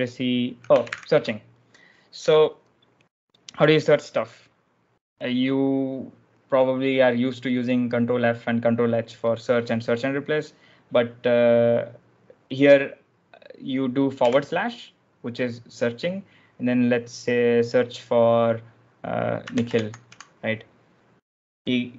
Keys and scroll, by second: 0.7 ctrl+j, 3.7 ctrl+l, 14.2 /, 19.0-20.4 typing.